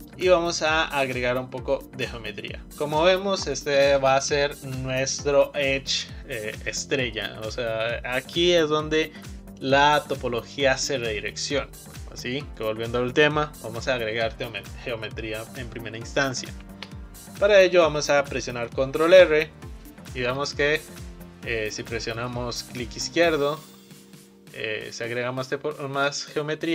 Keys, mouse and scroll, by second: 0.7-1.2 scroll down 1, 1.2-1.6 scroll up 1, 1.6-3.1 scroll down 1, 3.1 click, 18.9 ctrl+r.